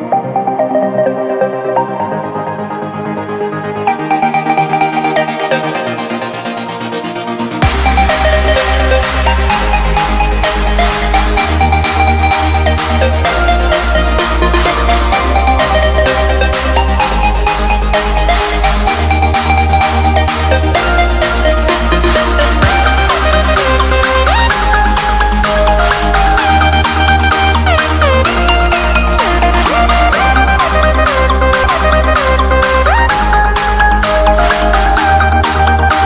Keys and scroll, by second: 1.2 5, 1.5 Return, 3.5 7, 3.7 Return, 11.8 Delete, 13.2 c, 13.7 Escape, 14.0 F2, 17.2 shift+Page_Down, 24.1 c, 24.5 Escape, 26.0 shift+Page_Down, 26.7 alt+c, 26.8 alt+w, 27.2 p, 28.9 c, 29.3 Escape, 30.5 shift+Page_Down, 31.2 alt+c, 31.6 p, 32.5 F3.